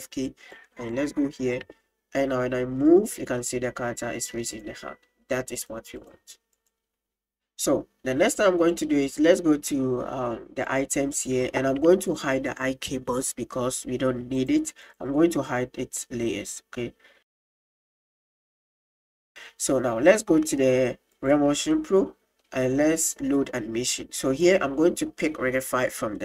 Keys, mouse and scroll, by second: 0.5-1.0 drag, 1.8 r, 5.6 click, 6.6 right click, 8.7 click, 10.7 click, 18.8 middle click, 19.0 middle click, 21.1 click, 21.7-22.4 middle drag, 23.0 middle click, 24.4-26.2 drag.